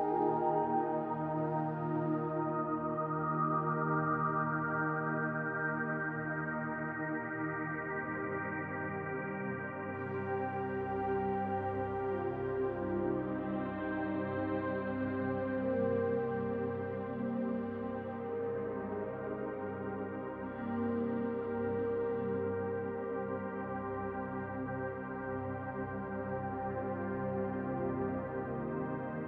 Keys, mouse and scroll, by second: 2.4 middle click, 4.3 Tab, 4.9 shift+middle click, 7.4 click, 9.7 middle click, 13.4 shift+middle click, 13.9 middle click, 15.9-16.5 scroll down 2, 20.6 middle click, 21.3 Tab, 21.7-22.2 scroll up 1, 22.2 click, 23.1 middle click, 24.3 click, 27.6 click, 28.1 click.